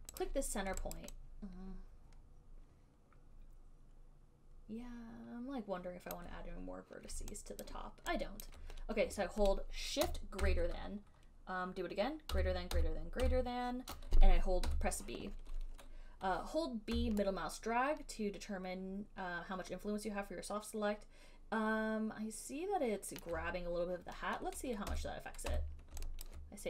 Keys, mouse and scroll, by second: 0.5 click, 1.1 alt+right click, 6.3 alt+right click, 7.8 alt+click, 8.6 alt+click, 10.6 >, 12.5 >, 13.0 >, 14.6-15.4 typing, 17.2-23.5 typing, 23.5 scroll, 24.9-26.2 typing, 26.5 alt+click.